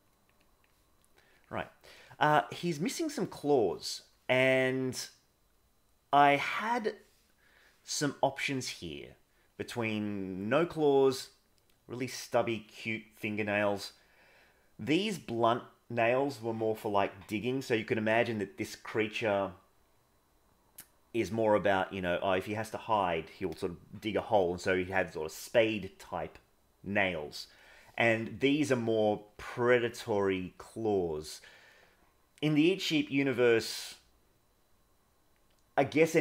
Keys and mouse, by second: 0.0 click, 0.5 click, 3.1 middle click, 4.0-7.5 middle drag, 9.1 middle click, 28.7 middle click.